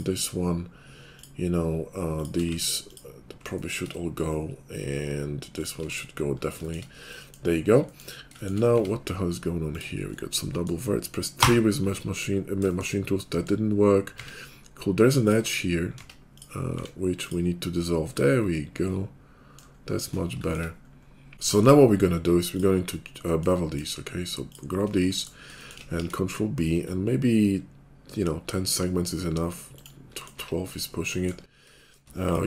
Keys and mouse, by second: 2.2-6.6 shift+middle drag, 2.5 x, 5.8 x, 6.6 shift+click, 6.8-8.3 middle drag, 8.3 shift+click, 8.5-10.1 middle drag, 8.8 Tab, 11.4-15.2 middle drag, 11.4 4, 14.1 Tab, 15.2 click, 15.3-18.6 middle drag, 16.0 Tab, 16.6 x, 18.6 click, 18.7 middle click, 18.8 click, 19.8-22.4 middle drag, 22.4 right click, 22.5-23.9 middle drag, 23.9 shift+click, 24.8 middle click, 25.5 shift+click, 25.8 middle click, 26.0 ctrl+b, 26.0 ctrl+click, 26.1 middle click, 26.2-30.4 shift+drag, 30.4-31.7 middle drag, 31.7 shift+click, 32.0 middle click.